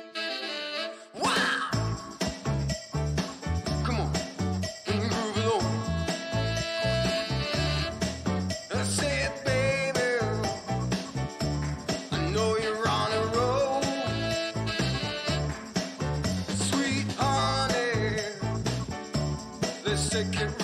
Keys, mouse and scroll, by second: 1.7 click, 3.2 ctrl+z, 4.4 click, 5.8 click, 8.8-10.4 drag, 10.8 ctrl+z, 13.0 click, 14.4-17.0 drag, 18.6-19.2 scroll up 2, 19.2 scroll down 2, 20.1 click.